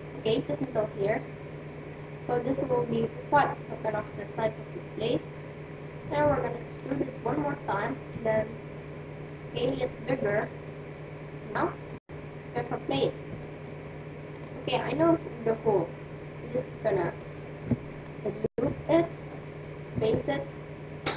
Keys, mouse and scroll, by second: 3.8 e, 8.1 s, 10.6-16.3 middle drag, 18.0-19.8 right drag, 20.0 f, 20.6-21.1 middle drag.